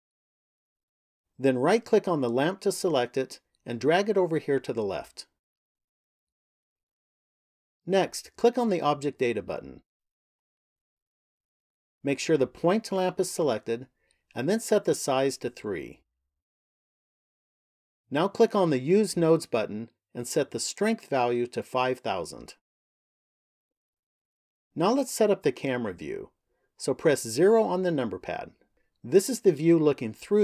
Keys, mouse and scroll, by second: 0.0 shift+middle click, 3.0 right click, 4.1 click, 9.4 click, 11.1 click, 15.1 click, 18.6 click, 20.2 click, 22.1 KP_0, 27.0 KP_0.